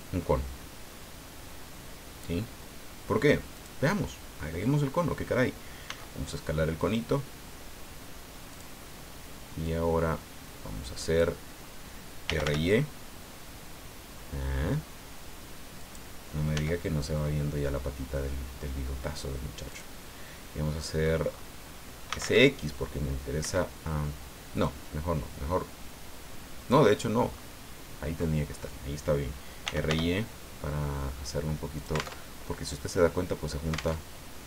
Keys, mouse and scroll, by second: 3.5 click, 4.3-4.6 scroll down 2, 5.8 s, 8.5 click, 9.6-11.3 drag, 12.0-12.9 typing, 15.8 click, 16.5 s, 19.7 click, 20.3 middle click, 21.8-22.7 typing, 23.4 Escape, 24.6-26.9 drag, 27.3-27.6 scroll up 2, 29.4-30.4 typing, 31.8 alt+click, 32.2 alt+Tab, 34.0 alt+Tab.